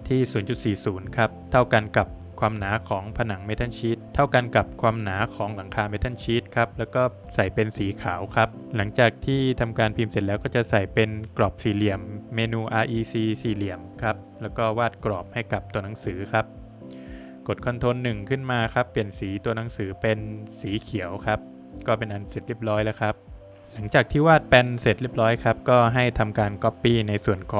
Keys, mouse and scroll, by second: 0.9 space, 2.1 BackSpace, 2.2 BackSpace, 3.6 space, 4.3 BackSpace, 4.5 BackSpace, 6.9 click, 8.0 Escape, 8.6 Escape, 10.0 space, 11.1 click, 13.3 click, 13.7 Escape, 14.3 click, 15.4 ctrl+1, 17.1 click, 18.5 click, 20.6 click, 21.3 Escape, 22.0 middle click, 22.6-23.0 scroll down 3, 23.4 middle click, 23.5 Escape, 23.6 scroll up 1, 24.3 click, 24.3-24.7 scroll up 1, 24.8 middle click, 26.1 space, 26.6 click, 27.0 scroll up 2.